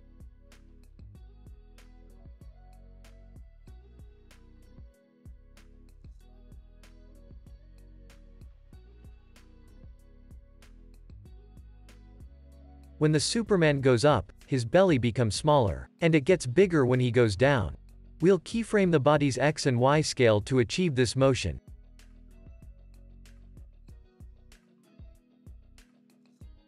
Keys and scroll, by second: 20.3 super+s, 21.0 z, 22.9 x.